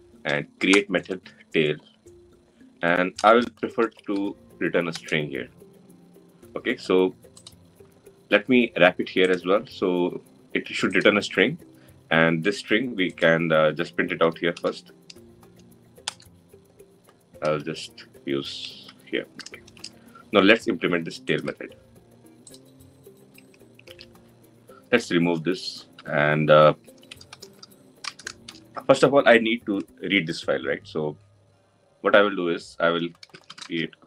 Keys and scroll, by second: 15.9 Return, 19.4 Delete, 21.1 Delete, 25.8 Delete, 28.9 Delete.